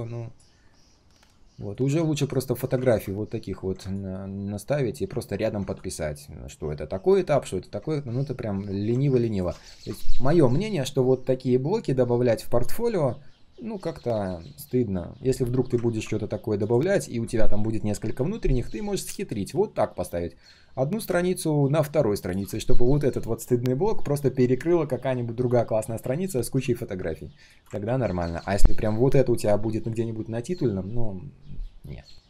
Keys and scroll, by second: 2.7 ctrl+z, 7.9 ctrl+z, 27.8 ctrl+z.